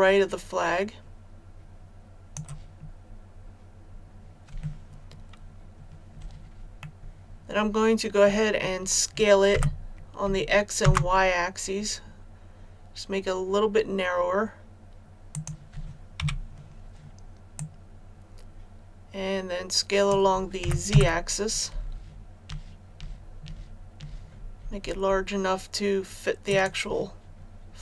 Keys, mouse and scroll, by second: 2.9-3.3 scroll down 1, 4.0 scroll down 1, 6.7-8.9 middle drag, 9.5 s, 10.7 shift+z, 15.2 click, 16.1 KP_1, 17.5-20.6 drag, 20.6 s, 20.8 z, 26.4-27.8 drag.